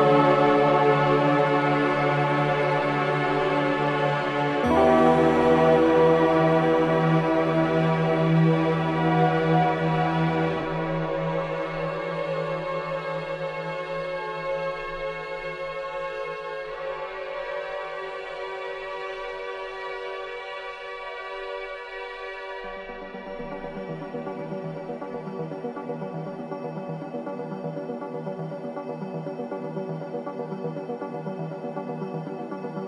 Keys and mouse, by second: 0.0-1.5 typing, 2.0-3.8 drag, 4.3 ctrl+alt+click, 4.8 ctrl+alt+click, 6.2 Tab, 6.8-7.8 drag, 6.8-7.8 typing, 8.6 click, 9.5 Tab, 11.0 ctrl+s, 12.0 click, 12.7 click, 13.8 middle click, 14.5-16.5 drag, 17.3 typing, 17.6 Return, 21.9 click, 25.5 Escape, 26.5 t, 27.4 click, 28.8 click, 30.0 click, 31.4 click, 31.9 alt+click.